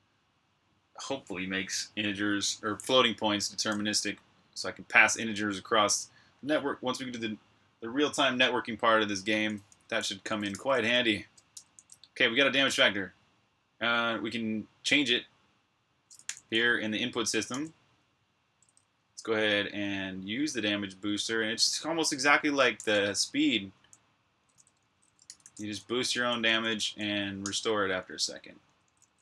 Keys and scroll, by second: 9.5-10.8 typing, 11.4 Escape, 16.1 super+j, 18.8-22.6 typing, 24.4-29.2 typing.